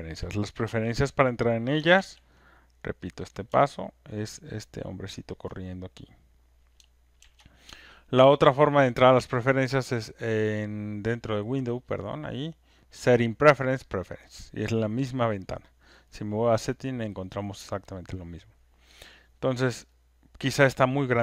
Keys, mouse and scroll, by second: 0.6 ctrl+F1, 1.9 ctrl+F1, 2.1 ctrl+F1, 2.1 ctrl+shift+click, 3.1 click, 5.4 ctrl+click, 7.2 ctrl+F1, 8.8 click, 10.2 click, 11.3 click, 12.0 click, 13.9 click, 16.0 click, 18.0 click, 20.6 click.